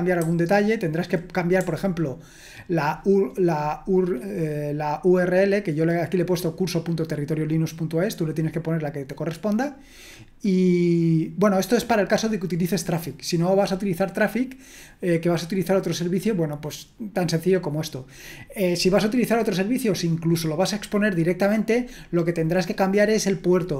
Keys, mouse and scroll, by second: 0.2-1.6 typing.